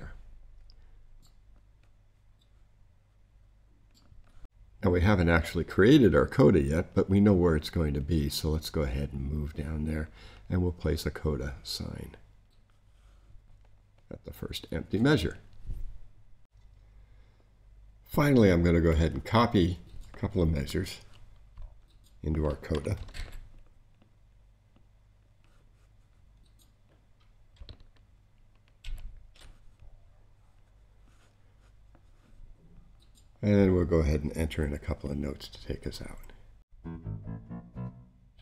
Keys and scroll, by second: 23.1 shift+super+c, 28.8 shift+super+v.